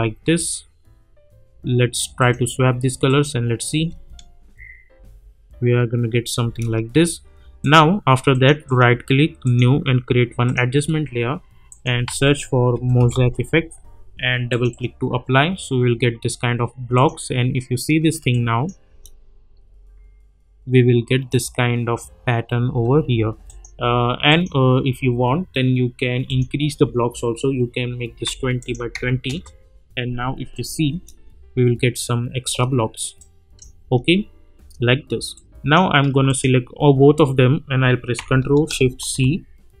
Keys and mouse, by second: 0.4 click, 3.7 space, 6.4 space, 7.6 click, 8.6 right click, 9.4 click, 12.0 ctrl+a, 12.5-13.6 typing, 14.5 click, 16.9 click, 18.6 drag, 18.9 space, 22.6 space, 23.4 click, 28.6 click, 29.2 Return, 30.5 click, 30.9 space, 33.2-33.8 click, 33.8 space, 35.3-36.0 click, 39.0 ctrl+shift+c.